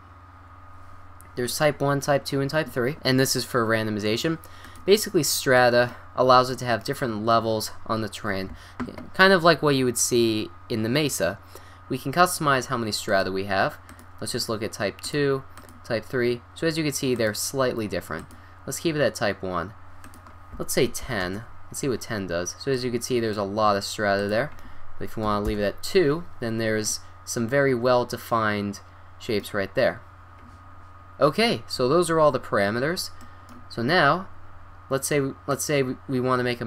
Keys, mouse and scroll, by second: 8.4 middle click, 25.4 click.